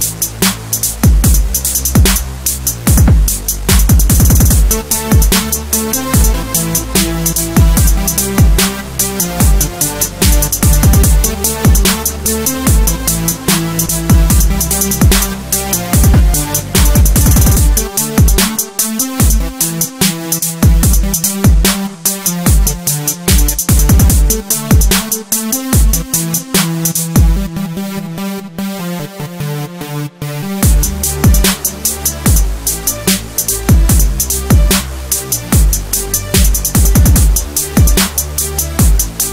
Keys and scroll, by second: 0.4 alt+a, 0.5 Escape, 1.4 Return, 2.8 Escape, 6.3 Return, 6.6 Escape, 11.6 Return, 15.4 Escape, 15.9 Delete, 16.4 alt+7, 16.6 alt+a, 16.7 Escape, 21.8 Return, 22.3 Escape, 22.5 Delete, 23.9 Return, 24.2 alt+7, 24.4 alt+a, 24.5 Escape, 25.5 Escape, 27.8 Return, 36.1 alt+2, 37.2 Return.